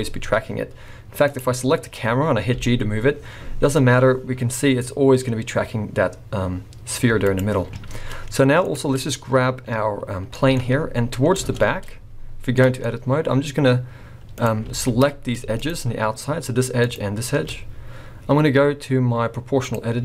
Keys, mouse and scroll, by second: 1.3 click, 2.6 g, 8.6 click, 9.0 scroll down 4, 10.3 middle click, 10.7-12.0 scroll down 1, 12.0 Tab, 12.0 scroll down 1, 12.6 middle click, 12.9-13.2 scroll up 2, 15.0 click, 15.0 alt+a, 15.6 alt+shift+click, 19.7 click.